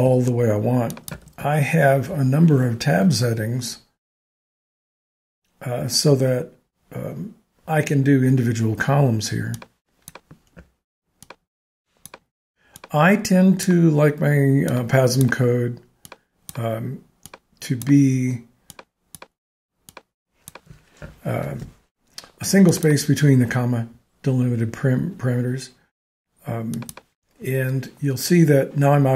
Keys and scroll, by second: 1.2 shift+Tab, 21.4 alt+shift+Tab.